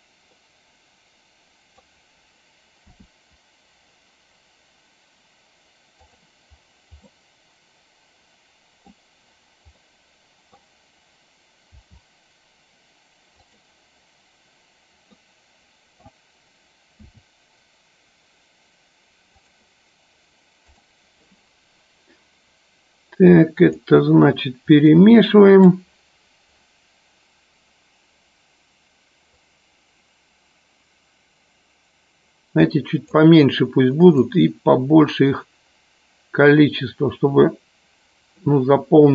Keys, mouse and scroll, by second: 0.5-2.1 middle drag, 2.9 r, 5.9-6.3 drag, 7.1-9.1 middle drag, 9.9 middle click, 11.8 r, 15.2-16.3 middle drag, 19.6 click, 20.6 click, 23.7 click, 25.0 middle click, 29.6-33.3 drag, 34.3-38.7 drag.